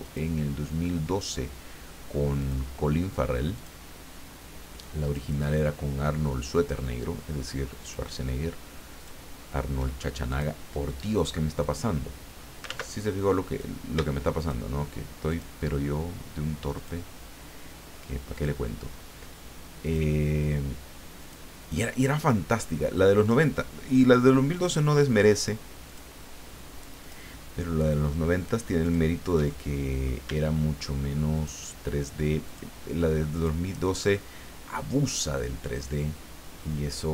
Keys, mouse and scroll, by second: 0.0 shift+click, 1.2 shift+click, 2.4 shift+click, 3.5 shift+click, 5.0 shift+click, 6.5 shift+click, 7.8 shift+click, 9.0 shift+click, 10.3 click, 11.6 click, 12.6 ctrl+z, 13.5 click, 14.4 shift+click, 15.3 shift+click, 16.7 shift+click, 18.3 shift+click, 19.8 shift+click, 21.2 shift+click, 23.2 shift+click, 24.5 shift+click, 25.8 shift+click, 27.0 shift+click, 28.8 shift+click, 29.6 shift+middle click, 31.4 shift+click, 32.4 shift+click, 33.4 shift+click, 34.2 shift+middle click, 35.9-37.1 drag.